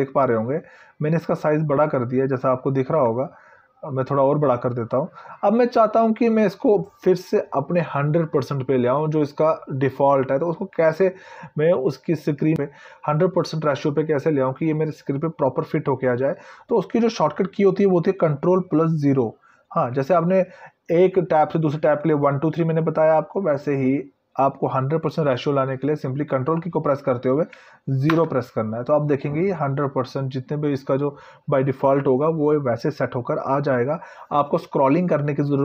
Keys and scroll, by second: 26.8 ctrl+0.